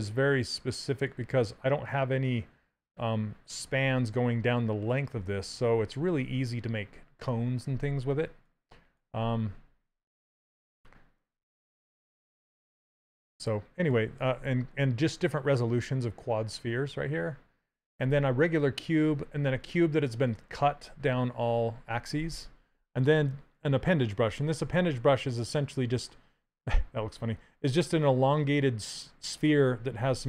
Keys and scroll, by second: 10.3 ctrl+z.